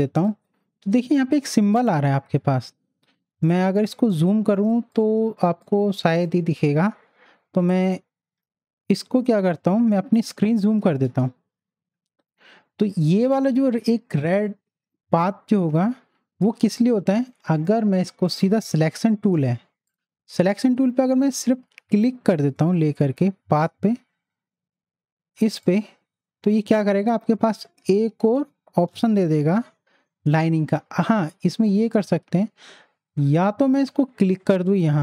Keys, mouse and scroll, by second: 3.4 click, 3.9 click, 4.8 space, 4.9 click, 5.3 space, 5.6-8.3 drag, 8.3 v, 16.9 v, 22.0 click, 23.0 click, 23.0 click, 25.6 click, 29.2 click, 29.8 ctrl+0, 34.7 click.